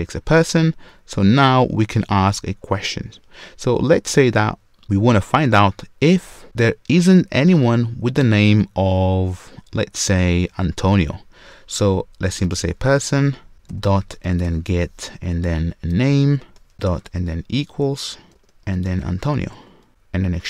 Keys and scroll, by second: 13.5 Return, 18.3 Return, 19.9 ctrl+shift+super+Return.